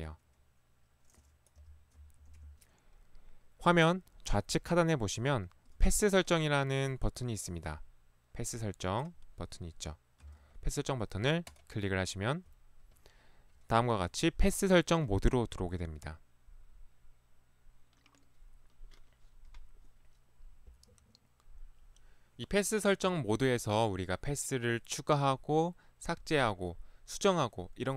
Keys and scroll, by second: 1.7 p, 2.3 Escape, 2.4 Escape, 5.8 ctrl+1, 6.9 ctrl+1, 10.3 ctrl+Escape.